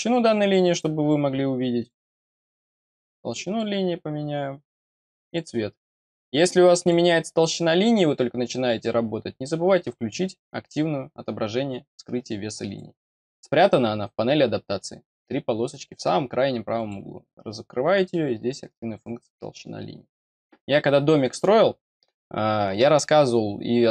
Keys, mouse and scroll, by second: 0.6 click, 1.7 click, 2.5 scroll down 1, 3.4 click, 5.2 click, 6.7 click, 12.6 click, 16.7 click.